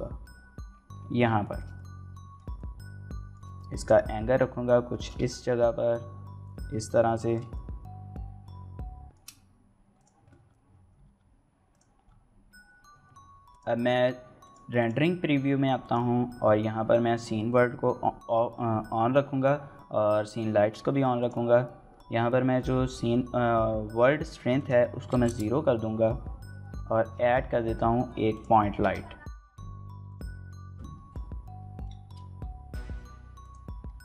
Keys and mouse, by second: 14.6 click, 14.6 n, 25.1-30.9 drag, 30.9 g, 30.9 z, 30.9 KP_7, 31.9-34.0 shift+middle drag.